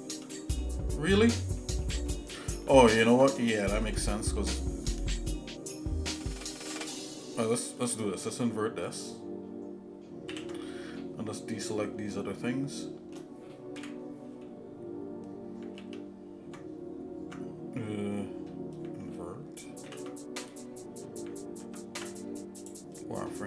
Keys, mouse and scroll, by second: 0.3 middle click, 0.9 middle click, 1.6 shift+middle click, 2.1 middle click, 2.9 ctrl+z, 3.6 shift+middle click, 4.1 middle click, 5.2 scroll up 1, 10.4 ctrl+i, 12.1-13.2 shift+middle drag, 13.8 KP_1, 15.8 ctrl+z, 20.0 ctrl+i, 21.6 ctrl+Tab.